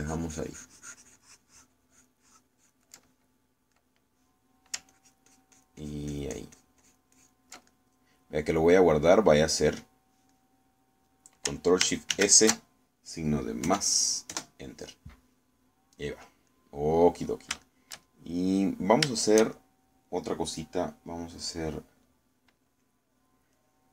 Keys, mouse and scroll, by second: 0.8-4.0 ctrl+drag, 4.0-5.8 ctrl+middle drag, 6.0-8.6 ctrl+drag, 8.8 ctrl+middle click, 9.6-11.3 ctrl+middle drag, 11.4 middle click, 13.2 ctrl+shift+s, 14.7 KP_Add, 15.4 KP_Enter, 17.6 middle click, 18.7-20.1 shift+middle drag, 20.2-21.3 shift+middle drag, 23.3-23.9 middle drag.